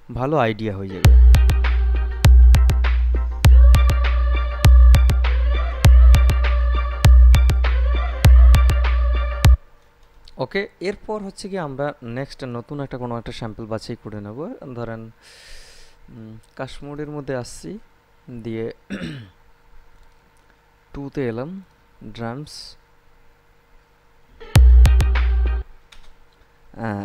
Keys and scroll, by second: 1.0 space, 9.7 space, 24.5 space.